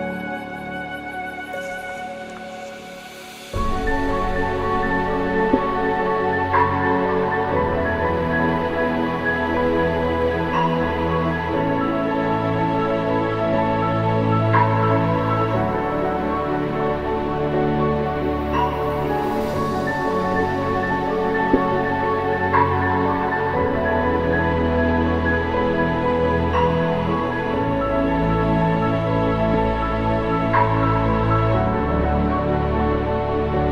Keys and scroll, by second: 3.9 ctrl+g.